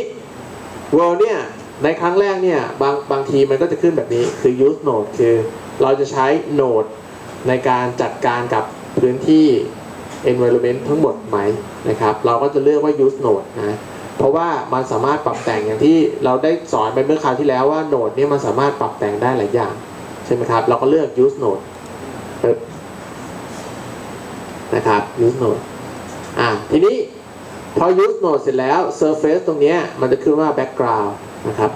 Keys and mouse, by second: 21.8-25.7 drag.